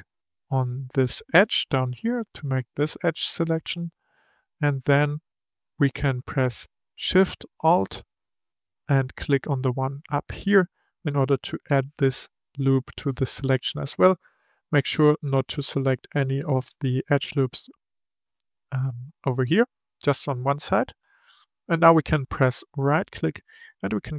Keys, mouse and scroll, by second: 4.3-7.3 shift+middle drag, 9.7 alt+shift+click, 13.1-13.6 scroll down 2, 13.6-16.6 middle drag, 18.0-21.2 middle drag, 22.8-24.1 right drag.